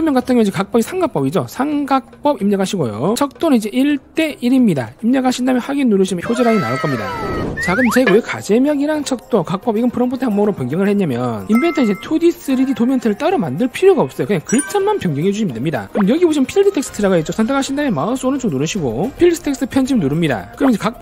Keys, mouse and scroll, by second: 1.4-5.2 typing, 17.9 click, 18.7 right click, 20.5 click.